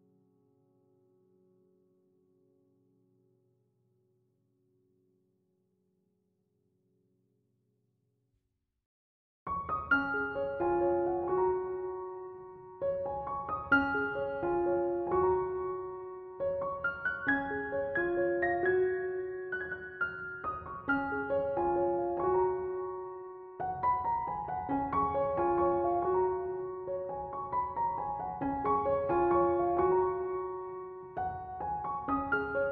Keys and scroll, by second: 19.4 space, 26.7 space, 32.5 space.